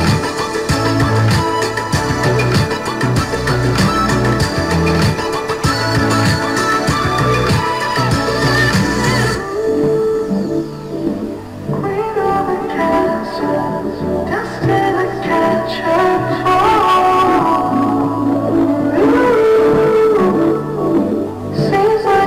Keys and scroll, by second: 8.6 ctrl+shift+i.